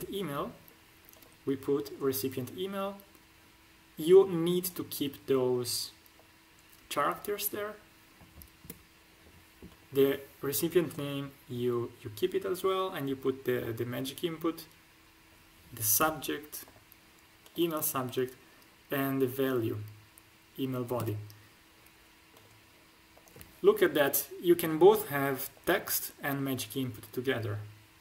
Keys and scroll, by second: 8.5 BackSpace, 15.9 BackSpace, 20.9 BackSpace.